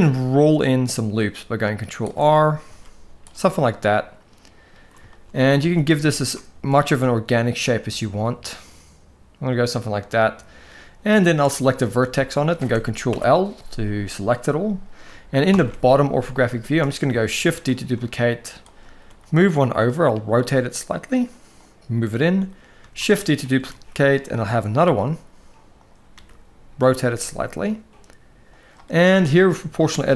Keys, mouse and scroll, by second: 2.6 ctrl+r, 3.6-4.4 middle drag, 4.9 shift+middle click, 5.4 alt+a, 5.9 alt+shift+click, 6.2 s, 8.0-10.4 middle drag, 11.8 click, 12.8 ctrl+l, 15.2 ctrl+KP_7, 16.3 shift+middle drag, 16.4 shift+scroll up 1, 17.0 shift+middle click, 17.0 shift+scroll up 1, 17.4 shift+d, 18.8 r, 20.1 g, 22.5 shift+d, 23.4 r, 24.7 g, 25.8 r, 26.8 g, 29.9 alt+a.